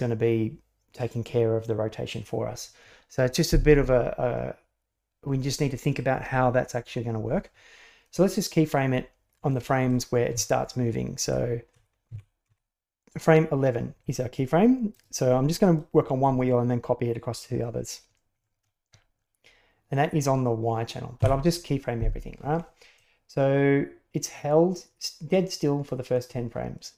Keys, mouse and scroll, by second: 8.1-9.5 drag, 10.3 Left, 11.2 Right, 11.7 Right, 12.1 Left, 12.4 Right, 14.9 click, 21.2 i, 22.9-26.1 drag.